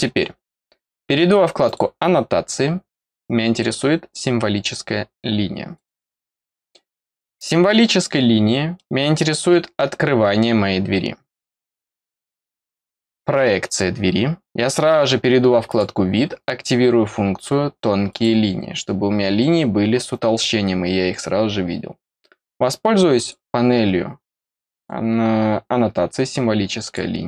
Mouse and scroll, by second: 1.6 click, 5.7 click, 7.1-7.6 scroll down 2, 7.6 middle click, 8.7 middle click, 15.6 click, 18.0 click, 23.1 click, 24.7 click, 26.8 click.